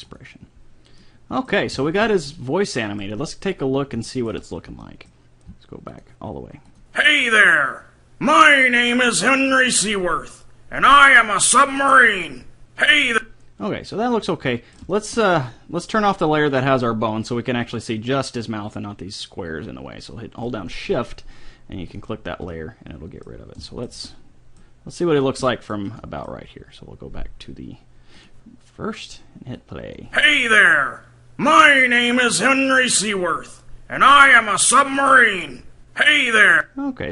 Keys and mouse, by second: 1.0 middle click, 5.9-8.6 drag, 13.0-14.7 drag, 14.5 right click, 14.7-15.8 middle drag, 21.9 click, 22.6-23.7 middle drag, 28.2-31.2 drag, 36.4 click.